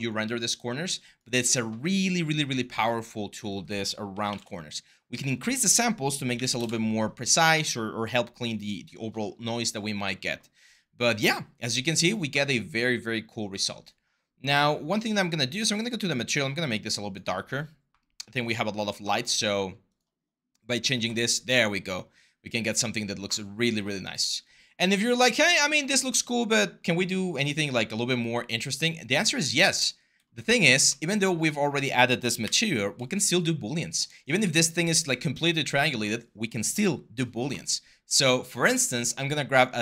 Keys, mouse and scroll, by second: 4.1 typing, 4.1 Return, 5.9-9.0 typing, 32.2 ctrl+s.